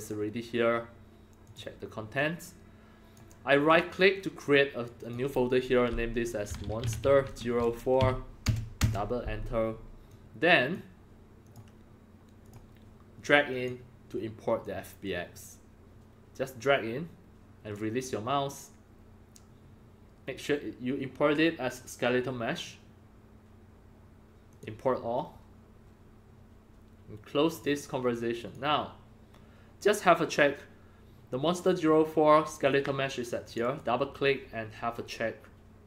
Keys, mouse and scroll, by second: 1.4 click, 2.1 click, 5.0 click, 5.9 click, 6.2-8.4 typing, 8.7 Return, 8.8 Return, 10.0 click, 11.4 click, 12.4 click, 13.5 click, 14.6-17.7 drag, 20.4-22.7 drag, 24.5-28.0 drag, 28.4 click, 29.3-30.2 scroll down 1, 31.2 scroll, 33.4 click, 33.7 click.